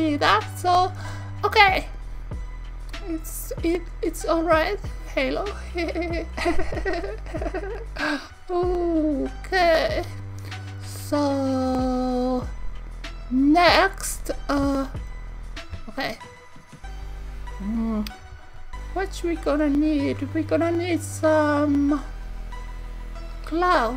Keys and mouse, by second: 2.8 click, 13.0 click, 14.5 KP_1, 15.7 z, 18.3 KP_3, 20.1 KP_1, 20.4 KP_3, 22.3 KP_1.